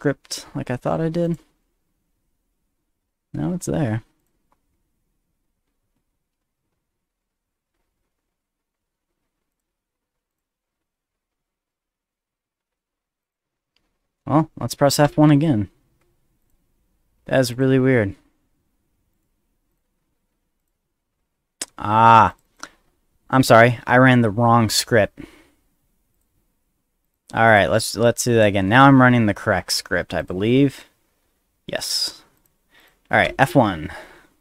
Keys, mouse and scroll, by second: 1.2 click, 4.2 click, 9.5 click, 10.3 click, 10.7 middle click, 13.2 click, 15.0 F1, 16.4 click, 17.5 click, 19.1 right click, 19.7 click, 20.6 click, 22.3 click, 22.4 click, 24.7 click, 26.1 click, 27.0 click, 27.5 click, 28.0 click, 30.2 click, 32.4 click, 32.8 click, 33.2 F1.